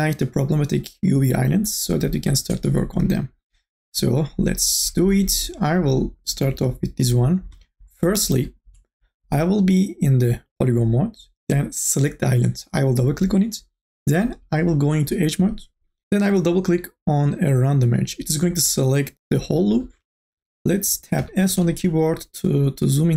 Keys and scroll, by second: 21.4 s.